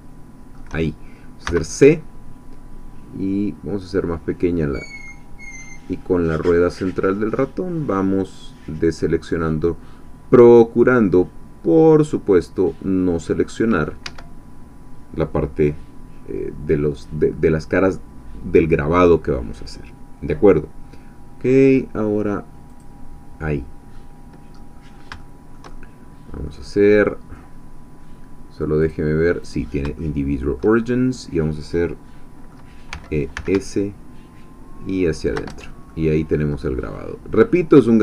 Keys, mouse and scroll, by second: 1.5 c, 3.7-4.7 scroll up 2, 5.1-13.6 middle drag, 14.1 Escape, 22.7 click, 23.9-26.7 middle drag, 24.7-25.2 scroll down 1, 26.7-27.3 scroll up 1, 27.3-28.1 scroll down 1, 28.8 click, 29.4 click, 30.0 shift+middle click, 30.9 shift+scroll up 1, 31.9 middle click, 32.9-33.8 typing, 35.2 shift+click, 35.5 shift+Tab, 35.9 shift+middle click, 36.6 scroll down 1, 36.9-38.0 drag.